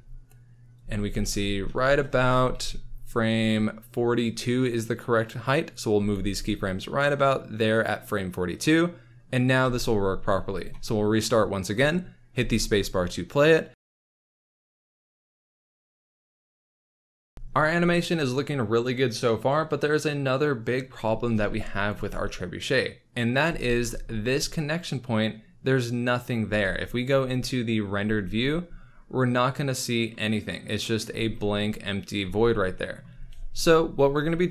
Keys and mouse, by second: 0.8 space, 1.1 space, 1.6 space, 2.6 Left, 5.2 drag, 5.9 g, 6.0 x, 7.7-9.0 drag, 9.6 ctrl+s, 10.6 click, 12.3 space, 14.5 space, 15.1 space, 17.1 alt+a, 22.0 space, 23.4 space, 26.4 z, 27.1 z, 30.1 click, 31.0 z, 32.2 z.